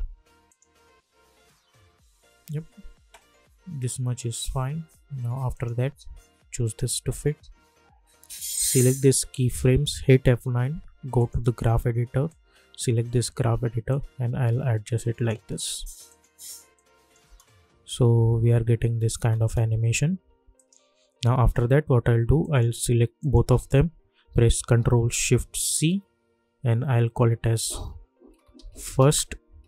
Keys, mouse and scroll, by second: 0.4 click, 1.5-2.9 scroll down 1, 3.6-5.4 scroll up 1, 5.5-10.0 drag, 10.0 F9, 11.1-17.2 drag, 17.2 space, 20.5 click, 20.8 u, 22.4 click, 23.2 shift+click, 25.7 ctrl+shift+c, 27.4-29.6 typing.